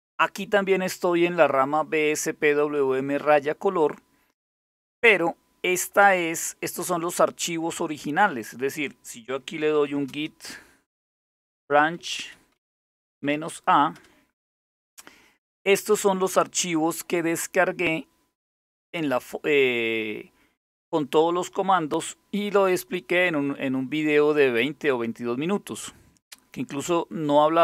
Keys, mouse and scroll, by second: 9.0-12.9 typing, 13.6 Return, 27.4 click.